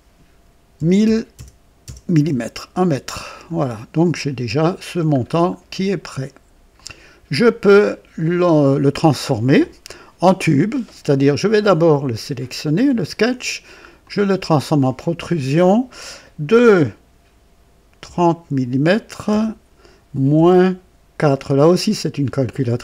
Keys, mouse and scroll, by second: 0.7-1.8 typing, 2.1 Return, 3.0-3.7 scroll down 2, 3.9-4.6 right drag, 4.9 typing, 5.1 scroll up 1, 6.7 click, 13.9 click, 18.0 KP_3, 19.2 KP_0, 20.3 KP_Subtract, 22.7 KP_4.